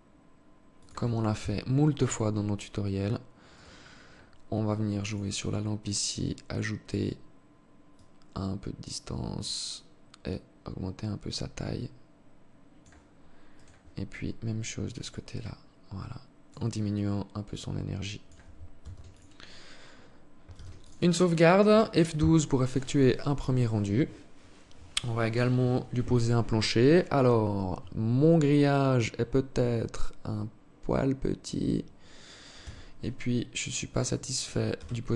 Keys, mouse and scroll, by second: 0.7 KP_3, 2.8 right click, 4.3 click, 5.4-5.9 scroll down 4, 7.3 click, 10.7 click, 12.9 right click, 14.4 click, 16.3 click, 18.1 ctrl+s, 19.9 ctrl+s, 31.9 Escape, 33.4 right click, 34.1 KP_0.